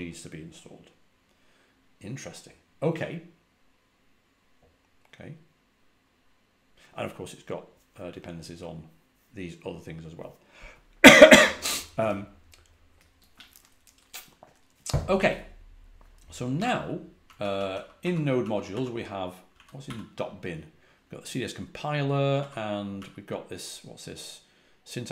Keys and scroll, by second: 16.5-19.7 typing, 22.3-22.9 typing.